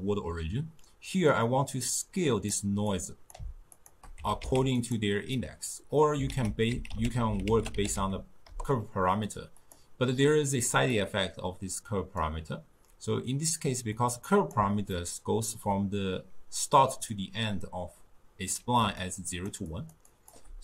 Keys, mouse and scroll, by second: 2.0-3.9 drag, 4.2 g, 5.4 middle click, 6.3 ctrl+a, 11.0-15.0 drag, 15.0-18.0 ctrl+middle drag, 18.9-20.4 typing, 19.1-19.5 drag, 19.8 click, 20.2 click.